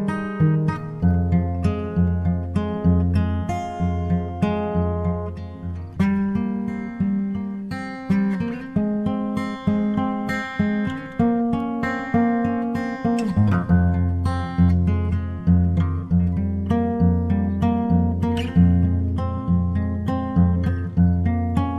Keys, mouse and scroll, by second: 4.9-6.5 drag, 6.7-9.4 drag, 13.3 BackSpace.